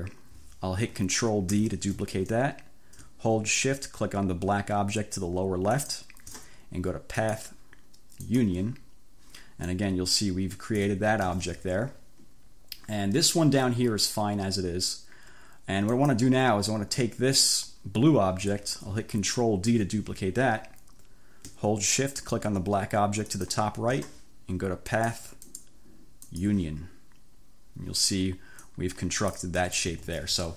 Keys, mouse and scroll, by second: 1.6 ctrl+d, 5.7 shift+click, 7.3 click, 8.3 click, 9.7-11.1 drag, 11.4 ctrl+z, 16.1 click, 19.7 ctrl+d, 23.3 shift+click, 25.0 click, 25.6 click, 26.4 click, 28.7 click, 30.0 ctrl+z.